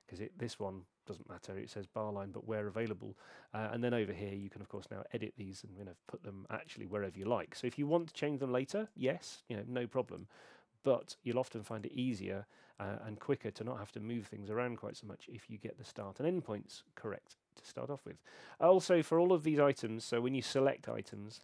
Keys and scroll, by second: 2.8 super+3, 12.9 super+2.